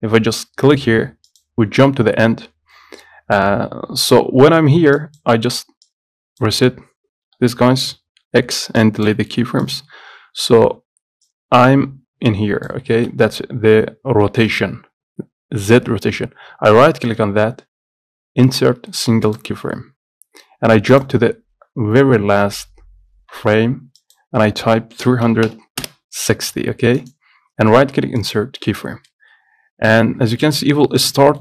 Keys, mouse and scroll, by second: 11.4-28.8 drag, 28.8-31.3 right drag, 31.3-31.4 middle drag.